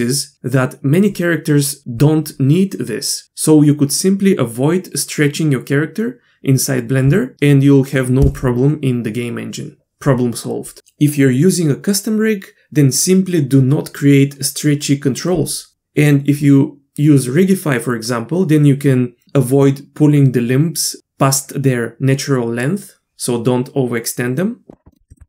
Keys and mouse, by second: 24.9 middle click, 25.1 shift+middle click.